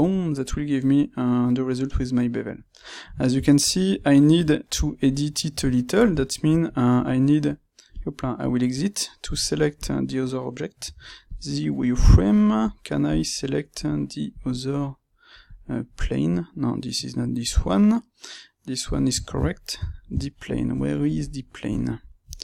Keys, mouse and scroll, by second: 0.0-7.9 middle drag, 7.9 click, 8.6 click, 9.7 click, 11.3 z, 11.9 click, 12.5 click, 13.8 click, 14.2 click, 15.4 click, 17.4-19.2 middle drag, 20.8-22.4 middle drag.